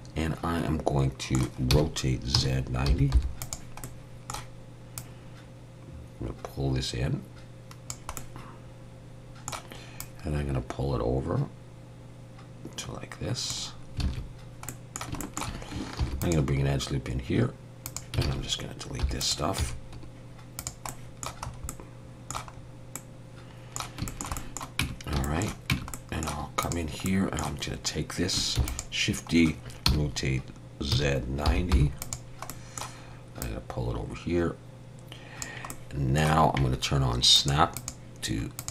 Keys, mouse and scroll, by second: 1.7 r, 3.9 middle click, 5.0 click, 8.2 middle click, 10.0 click, 14.0 alt+a, 14.7 middle click, 15.2 shift+middle click, 16.0 ctrl+r, 18.2 alt+a, 19.0 3, 19.2 click, 19.6 x, 20.9 middle click, 21.5-22.0 scroll up 2, 21.7 middle click, 22.6-22.9 scroll up 1, 23.0 middle click, 24.1 shift+middle click, 24.4 middle click, 24.8 Tab, 25.2 shift+middle click, 25.7 Tab, 25.9 middle click, 26.6 click, 27.1 middle click, 28.6 shift+d, 29.9 r, 32.5 middle click, 33.4 click, 35.7 middle click, 37.4 click, 37.8 click.